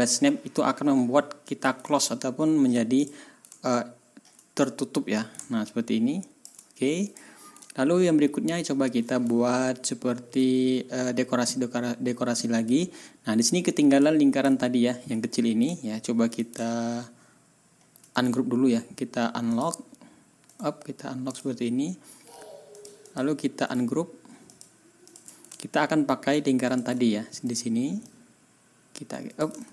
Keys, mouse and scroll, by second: 1.9 ctrl+scroll down 2, 2.3 ctrl+scroll up 2, 3.0 ctrl+click, 3.5 ctrl+scroll down 2, 4.0 ctrl+scroll up 2, 4.6-6.6 ctrl+drag, 7.0 click, 7.7-8.0 ctrl+scroll down 2, 8.3 ctrl+scroll up 2, 9.9 ctrl+scroll up 2, 13.9 click, 14.4 ctrl+scroll up 2, 15.7-16.1 ctrl+scroll down 2, 16.6 ctrl+scroll down 2, 17.2 ctrl+scroll down 2, 17.6 ctrl+scroll up 2, 18.1 ctrl+middle click, 19.5 click, 20.5 right click, 21.3 click, 22.7 click, 23.0 click, 23.3-23.6 scroll up 1, 23.6 right click, 24.5 click, 25.0 click, 25.6-26.2 ctrl+scroll up 4, 26.6 ctrl+middle click, 27.0 ctrl+scroll down 2, 28.0-29.5 drag, 29.6 ctrl+y.